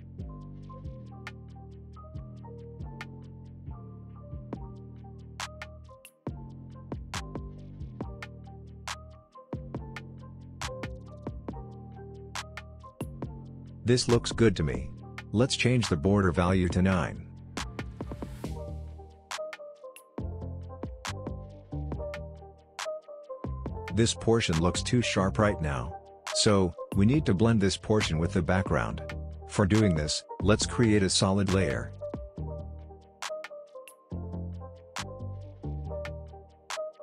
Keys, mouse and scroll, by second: 4.7 shift+r, 5.6-7.8 drag, 12.6-13.0 scroll down 1, 13.0-14.8 scroll up 1, 15.1 click, 16.7 Return, 18.0-19.9 scroll up 1, 20.1 click, 21.2 Return, 22.3-22.8 scroll down 1, 22.8 click, 23.7 scroll up 1, 23.8 click, 25.2-25.7 scroll up 1, 26.7-27.2 scroll down 1, 27.2-28.3 drag, 28.8 right click, 29.6 click, 33.3 click, 33.6-35.1 typing, 35.6 Return.